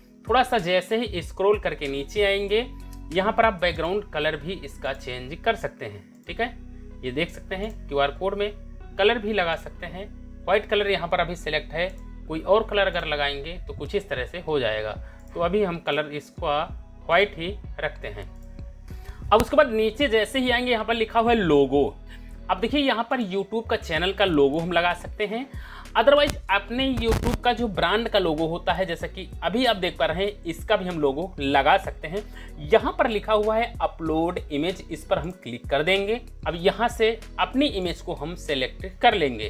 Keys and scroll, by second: 38.8 Return.